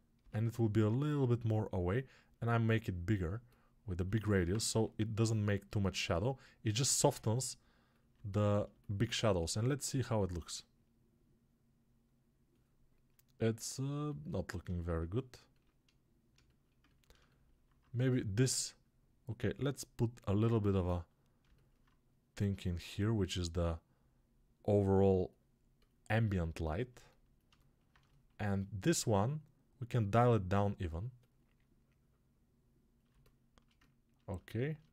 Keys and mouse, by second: 3.2-5.4 alt+drag, 5.4-13.0 alt+middle drag, 13.0-26.8 alt+drag, 26.8-33.0 alt+middle drag, 33.0-34.9 shift+drag.